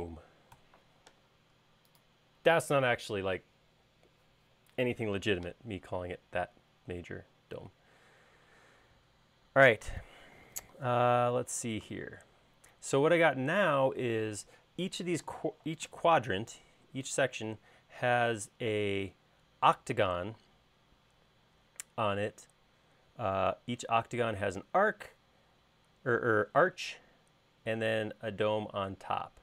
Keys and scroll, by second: 0.0-1.0 typing.